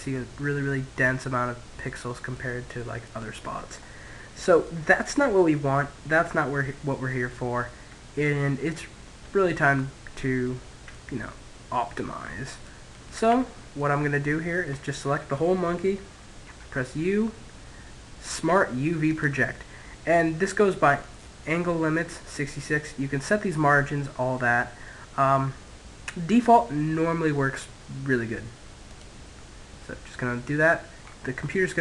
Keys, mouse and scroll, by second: 0.3-5.3 middle drag, 8.4-10.8 middle drag, 12.3 Tab, 13.5-14.6 middle drag, 15.3 u, 29.9-31.8 middle drag.